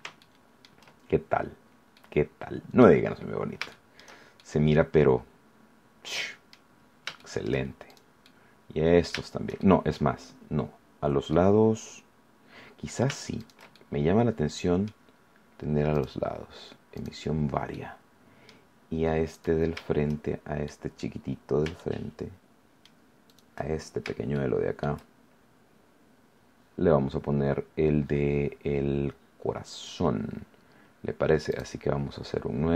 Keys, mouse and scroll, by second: 0.1 shift+middle click, 0.9-1.2 shift+scroll up 2, 1.3-1.8 scroll down 3, 1.9-3.0 middle drag, 3.0 scroll up 2, 3.1 middle click, 3.7 shift+middle click, 4.3-6.7 shift+middle drag, 6.7-7.1 scroll up 1, 7.1 shift+middle click, 7.8 shift+right click, 8.2-9.2 shift+middle drag, 9.5 shift+scroll down 1, 10.1 shift+scroll up 1, 11.3-13.1 middle drag, 13.3 shift+right click, 13.7-15.0 shift+middle drag, 15.9 click, 16.9 click, 17.7 middle click, 19.3 right click, 20.6 middle click, 21.2-21.6 scroll up 1, 21.7-23.0 shift+middle drag, 23.2 shift+right click, 23.7 shift+scroll down 1, 24.3 shift+middle click, 25.1-25.6 shift+scroll up 1, 26.3 scroll down 1, 31.5 click.